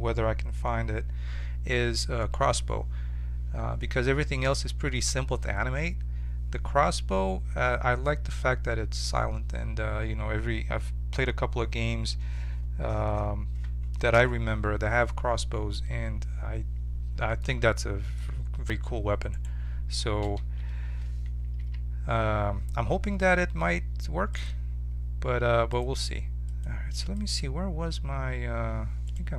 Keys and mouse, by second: 17.3-19.3 middle drag, 18.7 1, 19.3-21.2 right drag, 20.4 h, 21.6 ctrl+z, 24.3-29.1 drag, 29.1-29.3 right drag.